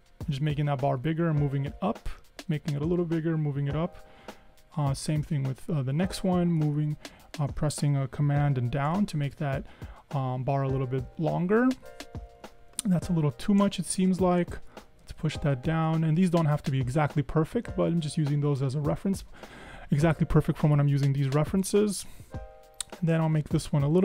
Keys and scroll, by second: 0.4 Up, 0.6 Up, 0.8 Up, 0.9 Up, 2.4 super+Down, 3.1 Up, 6.7 super+Down, 6.8 super+Down, 7.1 super+Down, 7.2 super+Down, 7.6 super+Down, 8.4 super+Down, 8.6 super+Down, 8.8 super+Down, 8.9 super+Down, 9.1 super+Down, 9.2 super+Down, 9.4 super+Down, 9.9 super+Down, 10.3 Up, 10.5 Up, 10.6 Up, 10.8 Up, 11.0 Up, 11.2 Up, 11.3 Up, 11.5 Up, 11.6 Up, 11.8 Up, 12.0 Up, 12.2 Up, 12.4 Up, 12.6 Up, 12.8 Up, 13.2 super+Down, 13.5 super+Up, 13.6 super+Up, 13.8 super+Up, 13.9 super+Up, 14.2 super+Up, 14.3 Down, 14.5 Down, 14.6 Down, 14.8 Down, 14.9 Down, 15.2 Down, 16.0 super+Up, 16.2 super+Up, 17.0 Down, 17.8 super+Down, 18.2 Up, 23.5 super+Down, 23.9 super+Down.